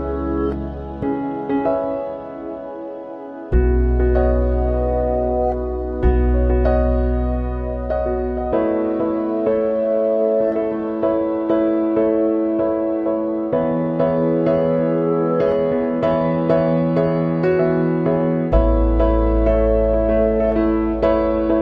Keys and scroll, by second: 15.1 ctrl+-.